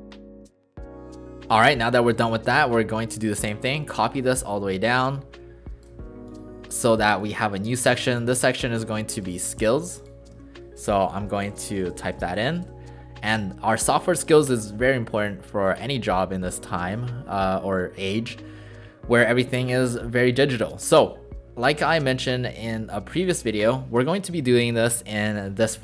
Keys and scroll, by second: 0.0-0.2 typing, 10.3 ctrl+shift+a, 11.4 BackSpace, 11.6 BackSpace, 22.6 ctrl+z, 23.5 ctrl+a.